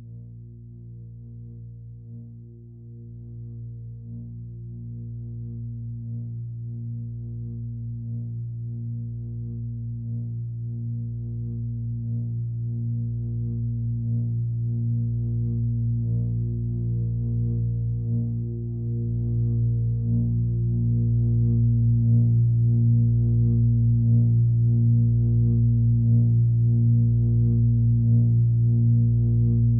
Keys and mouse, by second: 1.2 click, 2.1-4.0 drag, 5.2-7.1 drag, 10.9 click, 13.7-14.3 drag, 15.4-16.1 alt+middle drag, 17.5-18.3 drag, 19.1 click, 20.3-21.0 right drag, 21.4-22.3 alt+middle drag, 23.9 click, 24.3 click, 28.1-29.5 alt+middle drag.